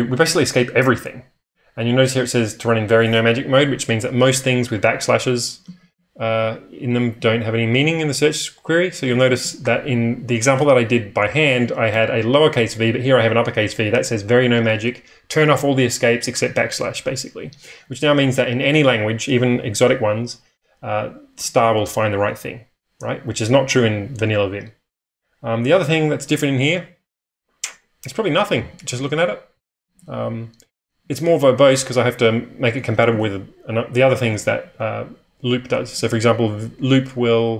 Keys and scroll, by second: 5.6 ctrl+o, 5.8 ctrl+o, 8.6-9.4 typing, 28.2-31.0 typing, 32.7-34.5 typing, 35.9 k, 36.0 k.